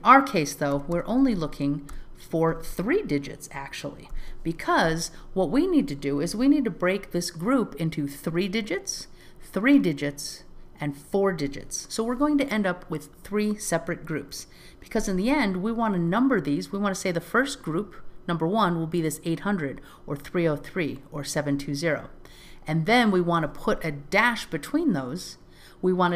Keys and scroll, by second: 6.3 alt+z.